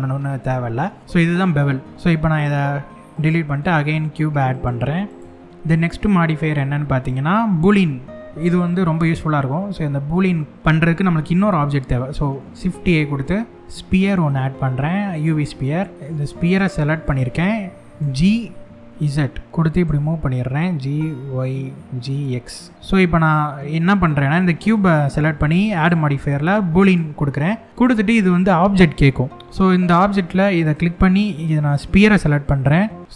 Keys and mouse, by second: 1.0 Tab, 1.4-1.8 drag, 2.0 x, 3.2 shift+a, 6.1-11.0 drag, 11.7 middle click, 12.5 shift+a, 16.2 click, 17.6 g, 18.5 z, 19.4 g, 20.5 y, 21.8 click, 21.8 g, 21.8 x, 22.7-23.9 middle drag, 22.7 g, 22.7 z, 24.4 click, 25.3-26.6 drag.